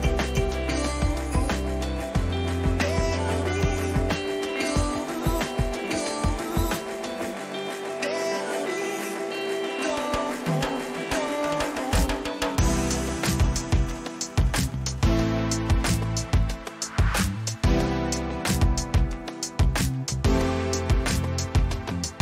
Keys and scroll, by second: 20.2 ctrl+j.